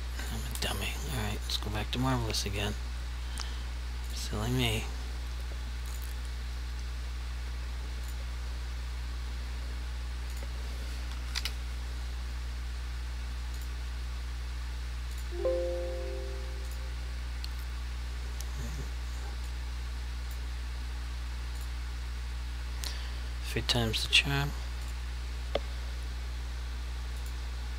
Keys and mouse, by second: 0.2 click, 0.5 Delete, 4.1 click, 11.1 typing, 13.6 click, 19.5 click, 19.5 click, 21.6 click, 24.9 click.